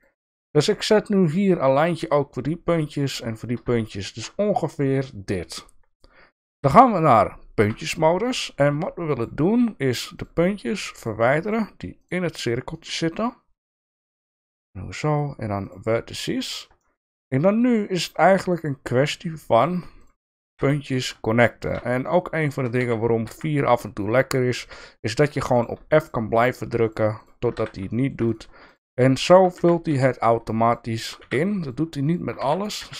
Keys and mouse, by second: 3.9 shift+middle click, 7.6 1, 9.1 shift+click, 12.0 shift+click, 12.8 shift+click, 14.3 x, 16.8 shift+middle click, 17.7 shift+middle click, 18.5 shift+click, 19.0 shift+click, 19.9 shift+click, 20.4 f, 20.9 click, 22.3 shift+click, 22.8 f, 24.5 f, 25.5 click, 25.9 shift+click, 26.4 shift+click, 26.8 shift+click, 27.1 shift+click, 27.5 f, 27.9 shift+middle click, 28.3 click, 28.6 shift+click, 29.5 f, 29.8 f, 30.6 shift+click, 30.9 shift+click, 31.1 f, 31.6 click, 32.4 f, 32.8 f.